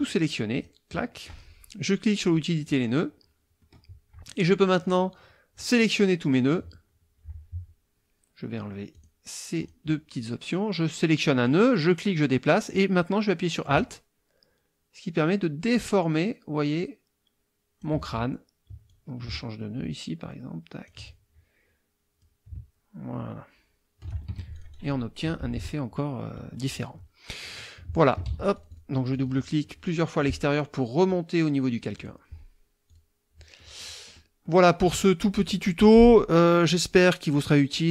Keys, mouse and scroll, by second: 0.0 click, 2.5 click, 3.6 click, 5.6 click, 8.9 click, 9.6 click, 11.4-18.0 drag, 18.9-21.0 alt+drag, 22.2-24.3 drag, 24.3 alt+F1, 24.5 alt+click, 25.2 KP_Subtract, 26.5 click, 27.4-28.3 drag, 28.2 ctrl+z, 28.5 ctrl+click, 31.9 click, 32.9 click, 33.6 middle click, 33.6 scroll down 2, 33.8 click, 34.1 click, 34.2 middle click, 34.2-35.0 scroll down 4, 34.4 middle click.